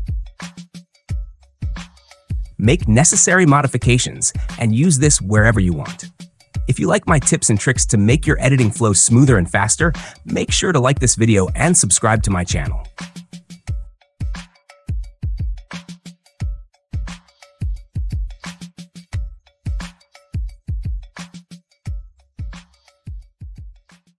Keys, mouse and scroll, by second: 1.5 click, 1.9 space, 4.4 space.